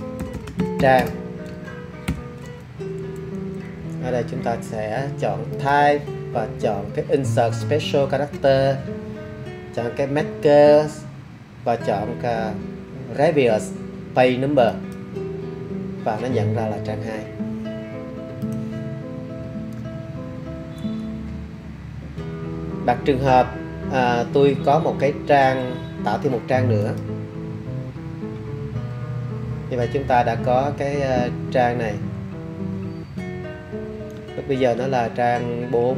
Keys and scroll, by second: 0.0-2.1 typing, 2.8 Left, 3.4 Left, 5.5 typing.